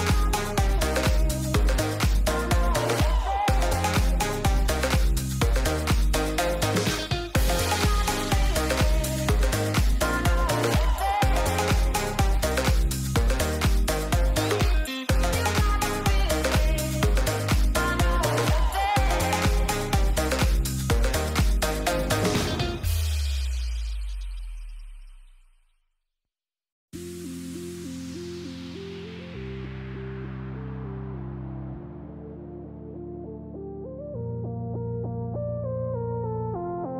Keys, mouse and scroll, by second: 0.0 middle click, 1.1 middle click, 2.3-2.8 middle drag, 3.2 middle click, 3.9 click, 5.0 shift+middle click, 9.8-11.5 drag, 12.9-15.7 drag, 17.7 Tab, 19.9 shift+middle click, 20.3 shift+middle drag, 21.7 shift+middle click, 22.0 shift+middle click, 22.8 shift+middle click, 23.2 click, 26.8 shift+middle click, 27.2 ctrl+s, 32.1 shift+middle click, 33.3 shift+middle click, 34.4 click, 35.7 shift+middle click, 36.4-36.9 drag.